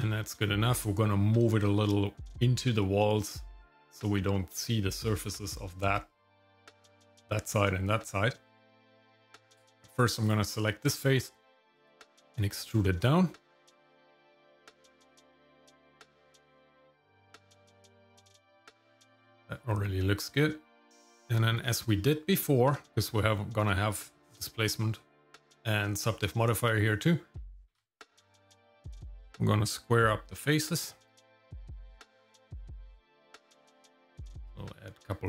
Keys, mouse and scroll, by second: 5.6 middle click, 6.2 middle click, 8.4 middle click, 9.1 Tab, 10.2 click, 11.7 e, 15.7 shift+middle click, 16.2 Tab, 16.8 middle click, 17.3-18.4 shift+middle drag, 18.8 shift+middle click, 19.7 scroll up 1, 21.5 Tab, 22.9 shift+middle click, 27.7 ctrl+r.